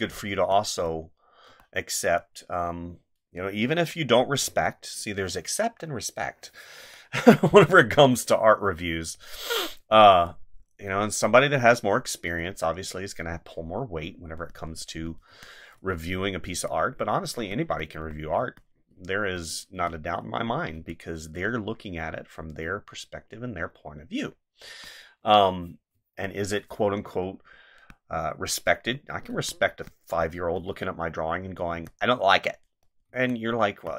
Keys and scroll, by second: 1.5 space, 4.5 space, 6.6 space, 12.2 space, 15.3 space, 18.4 space, 19.7 space, 24.6 space, 25.9 space, 29.3 space, 31.7 space, 33.1 space.